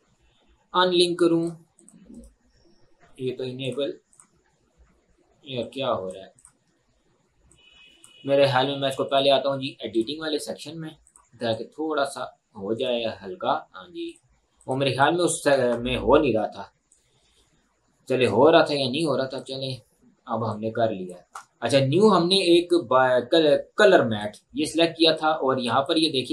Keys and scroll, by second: 15.5 Delete.